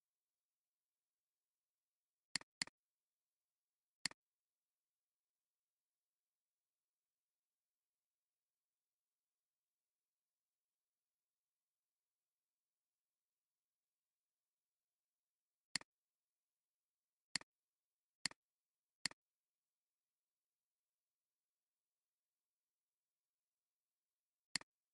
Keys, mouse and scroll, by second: 2.5 double click, 4.8-10.5 typing, 15.7 click, 18.9 click.